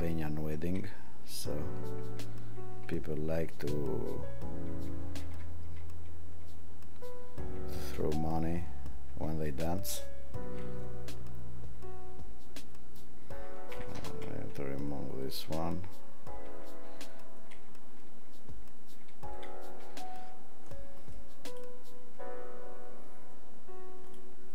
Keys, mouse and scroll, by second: 21.6 click.